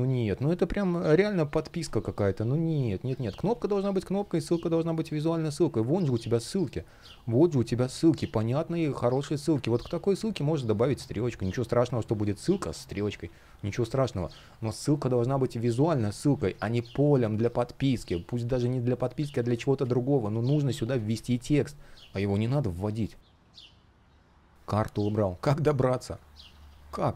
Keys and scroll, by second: 2.9 super+я, 3.6 space, 8.7 super+я, 13.8 space, 16.1 space, 17.7 space, 19.1 super+я, 22.2 space.